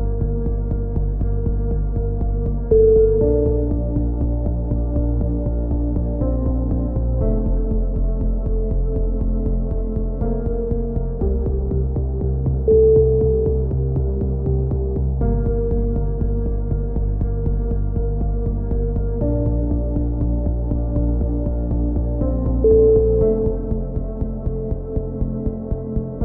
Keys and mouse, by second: 0.9 right click, 1.8 click, 2.2 a, 2.5-3.5 drag, 8.6 click, 9.0 middle click, 9.6 click, 9.9 a, 10.1 middle click, 10.2-12.2 drag, 10.7 z, 15.5 z, 16.1-17.2 drag, 17.7-18.7 drag, 20.0 click, 21.3 KP_7, 22.1-23.5 drag, 25.6-26.2 drag, 26.0 z.